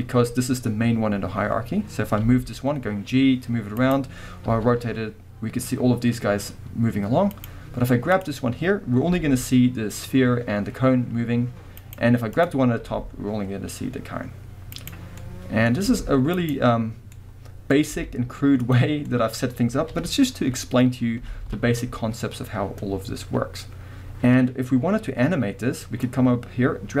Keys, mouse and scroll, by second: 2.3 g, 3.9 right click, 4.5 r, 7.4 right click, 8.1 click, 9.1 r, 12.0 right click, 12.4 click, 12.8 r, 14.9 right click, 15.1 scroll down 1, 15.2-20.1 middle drag, 15.8 r, 16.5 right click, 18.0 r, 18.8 click, 19.9 KP_1, 20.9-21.4 scroll up 2, 21.4 ctrl+z, 23.1-25.1 scroll down 2, 23.3-26.0 middle drag, 25.1-26.0 scroll down 1, 26.0-27.0 drag.